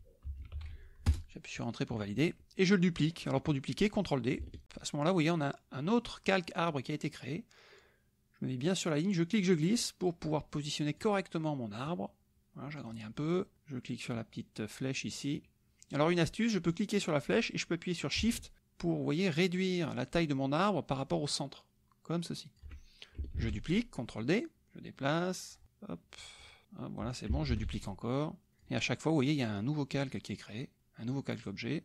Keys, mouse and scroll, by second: 0.2 b, 0.5 e, 1.1 Return, 4.6 ctrl+d, 9.1-11.2 drag, 11.8-13.1 drag, 13.5-16.1 drag, 16.7-22.7 drag, 23.4 ctrl+d, 24.2-27.3 drag, 27.5 ctrl+d, 28.1 click, 30.8-31.8 drag.